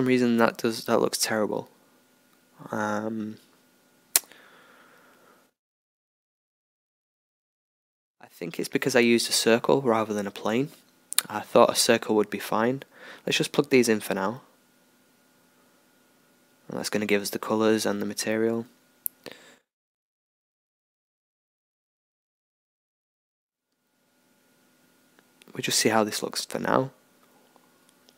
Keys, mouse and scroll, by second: 12.5-21.5 drag, 21.5 alt+a.